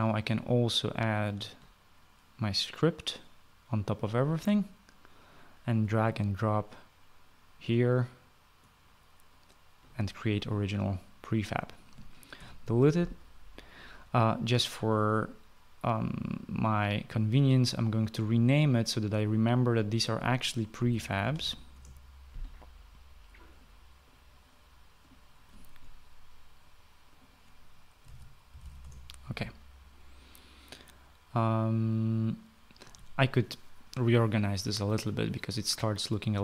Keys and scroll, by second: 13.2 Delete, 21.4-23.0 typing, 28.9-30.1 typing.